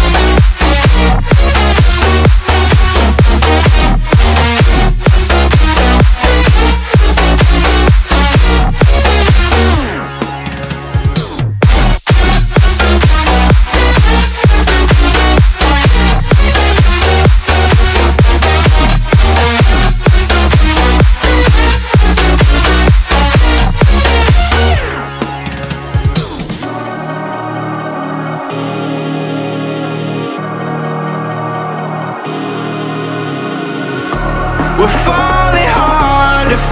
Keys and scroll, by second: 14.4 ctrl+[, 22.8 Return, 23.3 Right, 26.8-28.0 typing.